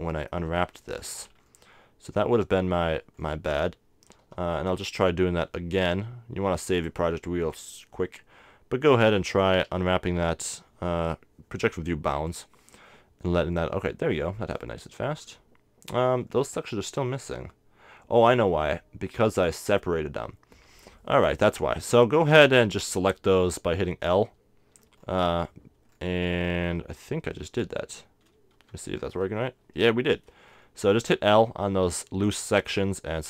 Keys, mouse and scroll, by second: 4.2 KP_7, 6.8-8.6 drag, 9.7 u, 13.8-19.2 middle drag, 21.1-24.3 middle drag, 24.3 l, 28.9 g.